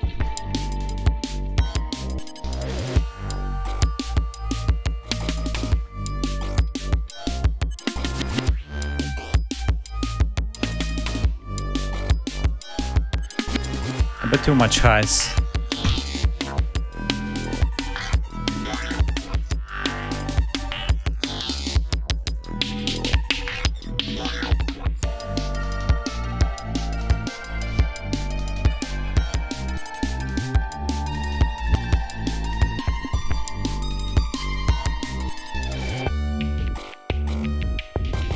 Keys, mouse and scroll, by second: 0.2 click, 1.3 click, 2.3-2.9 drag, 3.1 ctrl+scroll down 2, 3.5 ctrl+scroll up 2, 4.9 scroll down 2, 5.5 scroll down 2, 6.3 scroll down 2, 8.2-8.8 scroll up 2, 9.2 scroll down 2, 10.1-10.4 scroll up 2, 12.3 click, 15.0 right click, 18.0 click, 20.8 click, 21.7 scroll down 1, 22.2-24.8 drag, 26.0-27.2 drag, 28.9 ctrl+scroll down 1, 29.3 ctrl+scroll up 1, 30.8 scroll down 1, 31.9-33.3 scroll down 6, 33.6 scroll down 2, 34.1-35.0 scroll down 4, 35.0 scroll up 2, 35.3-35.6 scroll down 2, 36.6 ctrl+scroll down 2, 37.0 ctrl+scroll up 2, 37.5 scroll down 2, 37.9 scroll up 2.